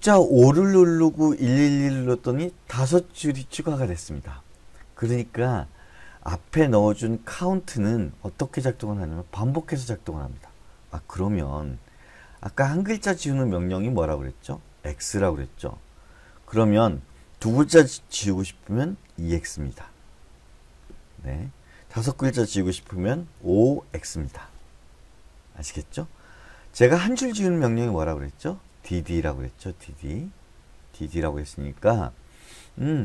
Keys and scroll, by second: 12.6-15.9 typing, 19.5 2, 20.9 x, 23.7-24.3 typing, 30.4 j, 30.6 j.